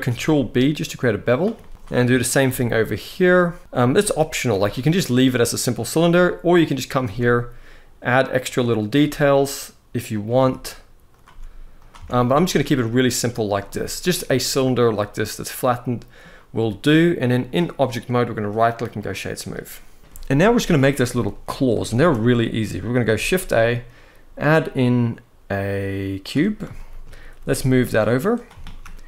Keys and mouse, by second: 1.3 middle click, 2.2 ctrl+b, 3.6 middle click, 4.2 i, 5.5 click, 6.8 e, 8.1 click, 8.7 i, 9.8 click, 10.1 e, 11.0 s, 11.7 Tab, 12.0-13.2 middle drag, 14.4-15.9 middle drag, 18.1-18.7 right drag, 19.7 KP_1, 20.9-21.2 shift+middle drag, 21.7 ctrl+s, 22.8 shift+a, 26.4 shift+middle drag, 27.1 g, 28.0 click, 28.3 shift+middle drag.